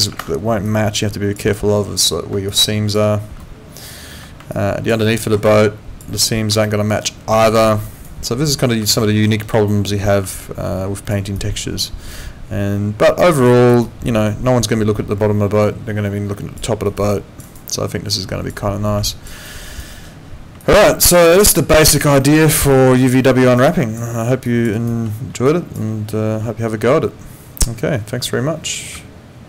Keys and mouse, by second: 0.1 ctrl+2, 4.1 Escape, 4.5 alt+click, 5.0 alt+middle click, 5.4 alt+click, 6.6 alt+middle click, 7.0 alt+right click, 7.6 alt+middle click, 7.8 alt+right click, 8.9 alt+middle click, 9.7 alt+middle click, 11.4 alt+click, 13.6 alt+right click, 13.8 alt+click, 16.9 alt+right click, 17.1 alt+click, 17.4 alt+right click, 17.7 alt+click, 19.1 alt+click, 19.4 alt+middle click, 19.7 alt+right click, 20.6 alt+click, 21.1 alt+right click, 21.4 alt+click, 22.2 alt+middle click, 22.4 alt+right click, 22.7 alt+click, 23.3 alt+middle click, 23.5 alt+right click, 23.7 alt+click, 24.4 alt+click, 24.7 alt+right click, 25.5 alt+click.